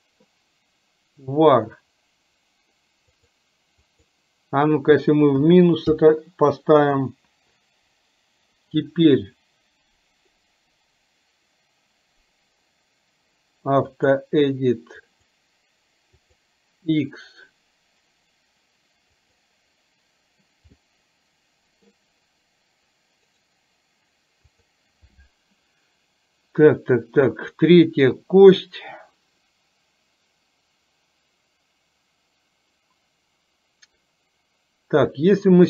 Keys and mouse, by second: 20.9-21.9 middle drag, 23.4-35.2 right drag.